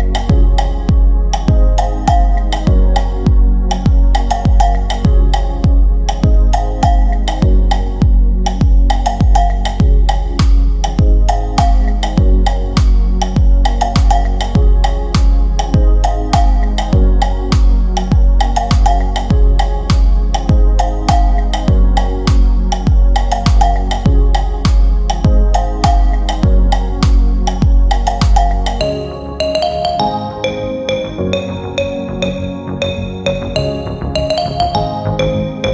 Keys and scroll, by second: 22.3 F3, 22.6 Escape, 23.3 shift+F2, 23.6 Escape, 32.1 Delete, 35.2 Delete.